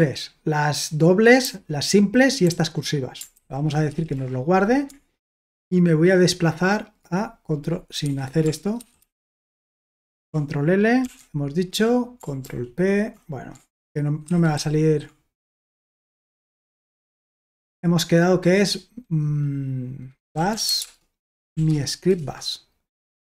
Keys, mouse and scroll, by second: 1.4 typing, 3.1-3.9 typing, 4.1 Return, 8.3 Escape, 8.8 ctrl+w, 9.0 ctrl+w, 11.0 ctrl+l, 12.4 ctrl+p, 14.3 ctrl+w, 14.6 ctrl+w, 15.9 ctrl+w, 16.1 ctrl+w, 16.6 BackSpace, 17.1 BackSpace, 17.3 BackSpace, 19.9-21.8 typing, 22.1 Return.